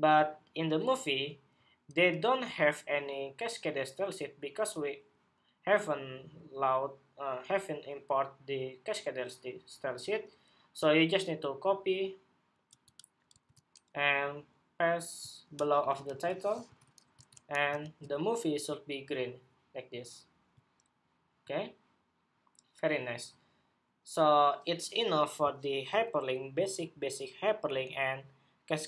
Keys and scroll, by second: 13.0 super+c, 15.8 super+v, 16.4 super+s, 17.1 super+Tab, 17.5 super+r.